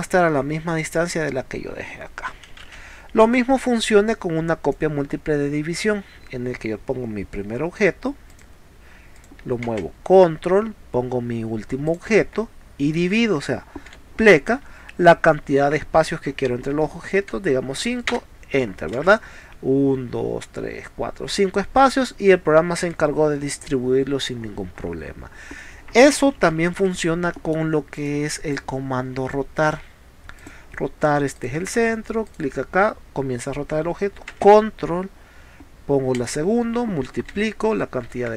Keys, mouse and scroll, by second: 2.7 ctrl+z, 3.3 space, 3.7-4.7 ctrl+drag, 8.3 click, 9.2 click, 11.9 click, 19.1 space, 24.7 middle click, 26.6 ctrl+z, 27.3 middle click, 28.1 click, 30.4 click, 31.4 click, 32.3 click, 36.2 ctrl+click.